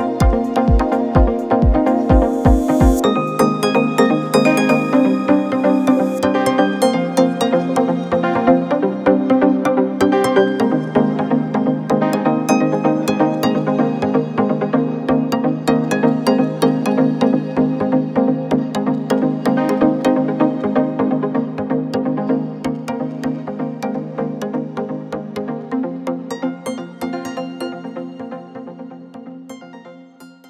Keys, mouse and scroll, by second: 0.3 click, 2.1-3.5 alt+scroll up 2, 4.5-5.0 alt+scroll up 1, 5.0 click, 5.3 ctrl+t, 6.9-7.6 alt+scroll up 2, 7.6 click, 7.9-8.9 alt+scroll up 2, 9.2 ctrl+t, 10.4-11.4 drag, 11.9-13.7 drag, 14.0-14.8 alt+scroll down 1, 15.4 alt+scroll up 1, 17.9 alt+scroll up 1, 21.2 click, 22.2 click, 23.3 Tab.